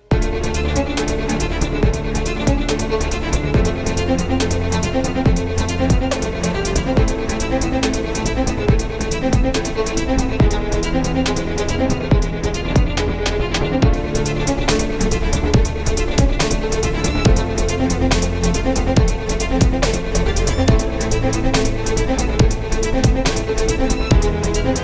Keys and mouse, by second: 0.9 s, 2.3 z, 4.7 s, 5.8 z, 6.4 z, 7.2 KP_7, 7.7 z, 10.2 shift+d, 16.0 z, 17.0 Tab, 17.9 r.